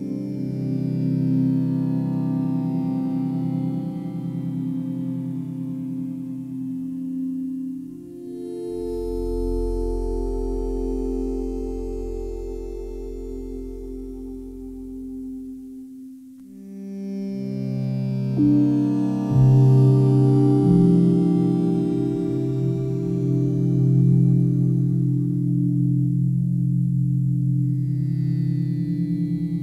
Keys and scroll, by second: 3.5 Delete, 10.5 Delete, 16.0 ctrl+z, 19.0 s.